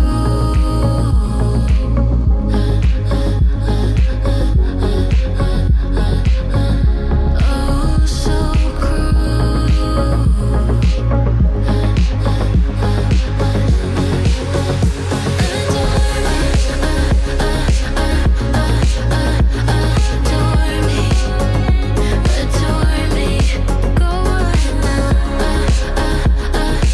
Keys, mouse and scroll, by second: 1.1 click, 1.7 space, 7.8 space, 8.8-12.1 drag, 13.6 ctrl+space, 14.1-16.6 typing, 17.4 Return, 19.6 click, 21.1-22.1 typing, 23.4-26.9 drag, 26.1 typing.